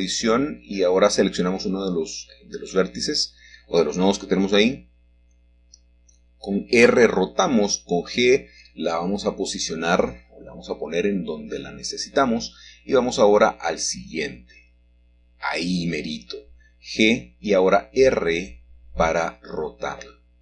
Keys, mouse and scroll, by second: 0.2 click, 1.9 r, 6.3 ctrl+click, 8.7 g, 11.4 click, 13.7 click, 15.0 g, 17.7 click, 19.2 r.